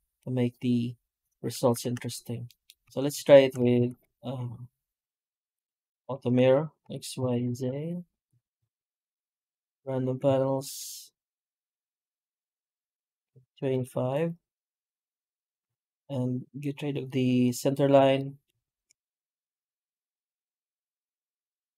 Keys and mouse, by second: 1.7 ctrl+z, 2.3 middle drag, 2.7 Tab, 3.0 Tab, 3.6 ctrl+shift+x, 7.5 Tab, 8.0 a, 8.1 Tab, 8.5 shift+q, 18.0 middle drag, 18.3 middle click, 18.5 shift+middle drag, 19.0-19.4 middle drag, 19.7 shift+middle click, 20.0 middle click, 20.4 middle click, 20.5 F9.